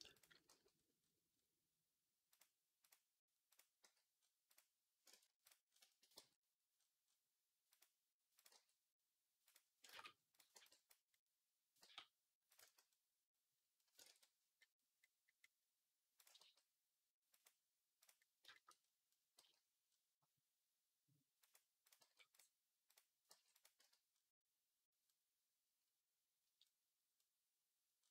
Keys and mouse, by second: 0.3 g, 3.7 s, 5.0 ctrl+z, 6.0 g, 8.4 g, 9.8 ctrl+z, 10.4 b, 11.7 g, 12.5 z, 13.9 ctrl+z, 16.3 g, 19.2 g, 23.6 z.